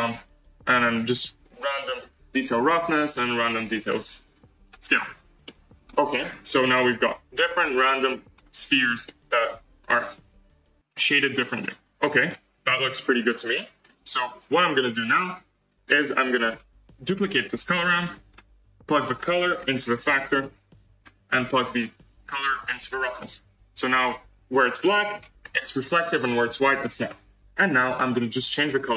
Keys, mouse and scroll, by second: 2.5 click, 3.3-3.6 drag, 5.5 middle click, 6.3 scroll up 1, 6.4-8.3 middle drag, 8.3-9.0 scroll down 1, 9.0-11.8 middle drag, 13.7-17.6 drag, 17.6 shift+d, 20.9 click, 23.1 click, 23.9-24.8 scroll up 4, 24.8 middle click, 25.1-26.2 scroll up 1, 26.2-27.2 scroll down 2, 28.7-28.9 drag.